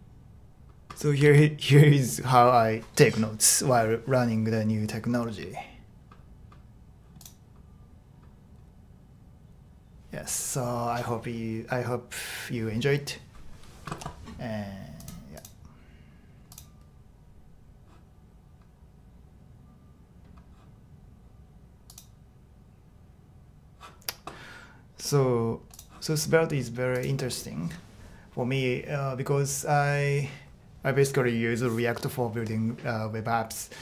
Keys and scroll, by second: 1.2 super+e.